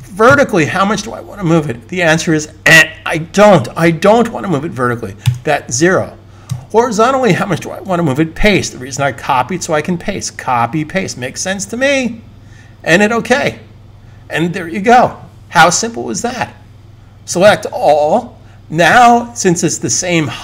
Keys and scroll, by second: 5.1 0, 8.1 super+v, 17.3 super+a.